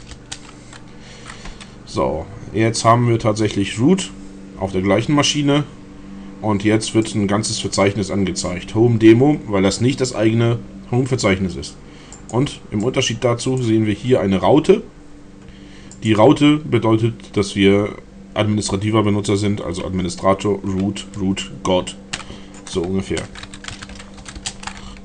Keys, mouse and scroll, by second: 7.1-8.7 drag, 12.2 click, 12.9 click, 16.0 click, 23.0-24.7 typing.